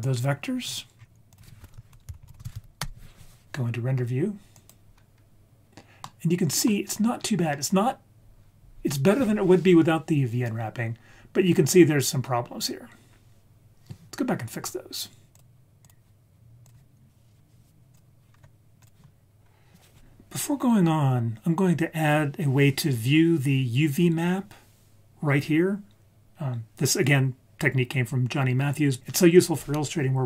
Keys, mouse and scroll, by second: 0.6-1.3 scroll down 3, 1.0-1.3 scroll up 2, 1.3 click, 4.6 click, 5.8 ctrl+s, 6.0-6.6 middle drag, 6.9-8.0 scroll up 4, 15.3 click, 16.6 click.